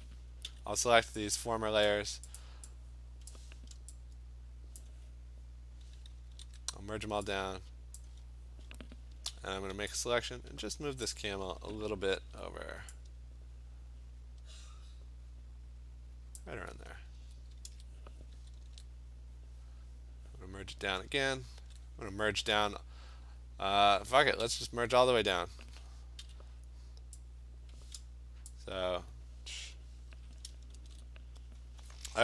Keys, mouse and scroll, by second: 0.5 m, 1.9 click, 2.4 click, 2.9 m, 3.4 click, 4.8 click, 6.4 ctrl+e, 8.0 click, 9.3 v, 11.1 click, 12.2 ctrl+h, 16.4 click, 17.7 ctrl+z, 18.7 ctrl+e, 21.6 ctrl+e, 24.5 ctrl+e, 26.3 m, 28.5 click, 29.7 m, 30.8 ctrl+h.